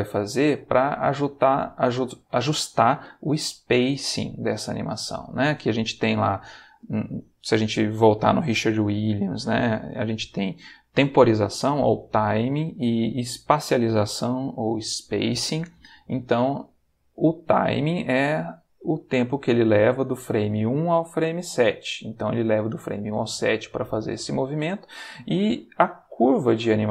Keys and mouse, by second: 19.1 click, 21.5 click, 25.6 click, 26.0 g.